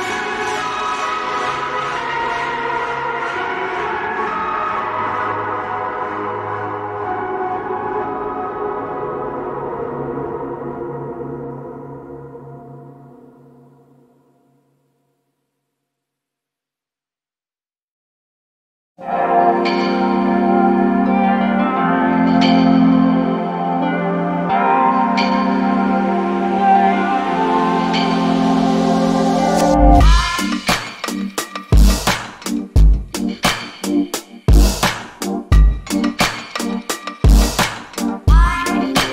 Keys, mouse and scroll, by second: 0.4 alt+click, 1.8-2.5 scroll up 1, 2.5 click, 5.2 scroll down 1, 5.6 alt+click, 10.5-10.8 scroll down 1, 10.8 alt+click, 11.8 alt+middle click, 12.2 alt+click, 14.4 alt+middle click, 14.7 alt+click, 17.5-18.0 scroll down 1, 18.0 alt+click, 20.1-20.7 scroll up 1, 20.7 alt+click, 21.3 alt+middle click, 21.9 click, 22.3 double click, 22.6 right click, 23.0 click, 25.9 double click, 26.8 BackSpace, 27.0 click, 27.9 BackSpace, 28.2 click, 28.7 scroll down 1, 28.9 alt+click, 31.7 scroll up 1, 32.5 alt+click, 34.7 alt+scroll down 1, 35.0 alt+click, 37.1 alt+middle click.